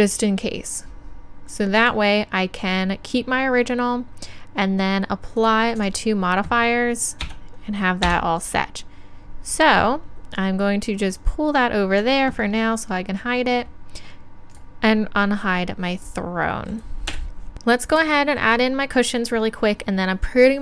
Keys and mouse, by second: 1.9-3.7 drag, 5.4-7.7 drag, 7.3 Tab, 11.2-16.7 drag, 14.6-17.1 middle drag, 16.2 right click, 17.1 KP_1.